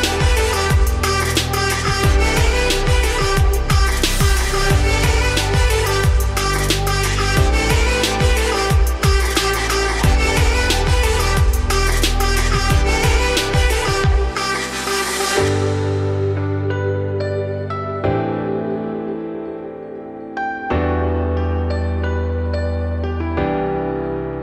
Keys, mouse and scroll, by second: 2.5 scroll up 2, 2.8-3.3 shift+middle drag, 3.3 scroll down 1, 3.6 scroll up 1, 4.3-4.7 shift+middle drag, 4.7 g, 6.9-7.8 scroll down 2, 7.8 z, 8.3 shift+click, 9.0-12.1 typing, 10.1 ctrl+click, 11.7 ctrl+drag, 12.0 scroll down 2, 12.3-12.9 scroll up 5, 12.9-13.4 shift+middle drag, 13.4 alt+d, 17.3-17.6 shift+middle drag, 17.6-18.1 scroll up 2, 18.1-18.7 scroll down 2, 18.7 scroll down 1, 18.8 scroll up 1, 19.0 g, 20.0-20.7 shift+middle drag, 20.7 alt+d, 24.2-24.4 scroll down 1.